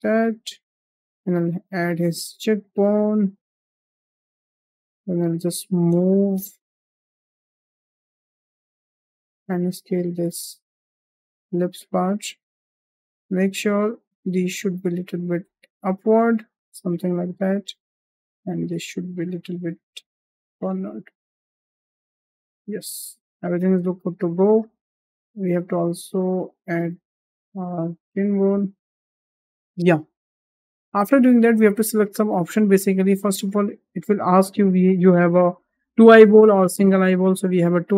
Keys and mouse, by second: 0.1 g, 1.2 drag, 1.5 g, 3.0 drag, 3.2 g, 5.0 shift+middle drag, 5.4 click, 6.6 l, 7.9 s, 10.0 shift+middle click, 10.9 g, 14.1 click, 14.6 click, 15.9 g, 17.7 click, 19.7 g, 20.5 click, 20.9 g, 23.7 shift+middle click, 25.1 click, 25.7 shift+middle drag, 26.6 g, 27.4 click, 27.8 drag, 28.3 g, 30.4 shift+middle click, 31.6 shift+middle click, 37.6 click.